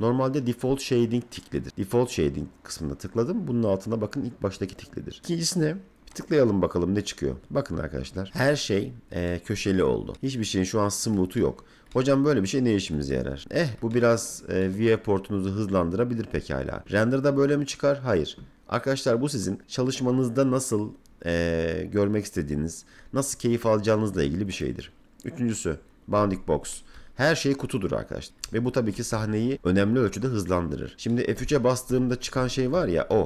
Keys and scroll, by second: 29.1 F3, 31.3 F3.